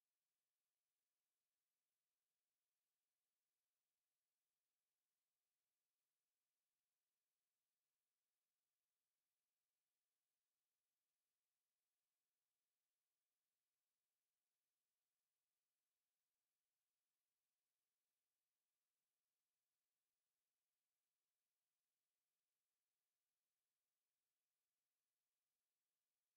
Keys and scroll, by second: 7.8 ctrl+c, 8.8 ctrl+x, 10.1 ctrl+v, 10.8 ctrl+a.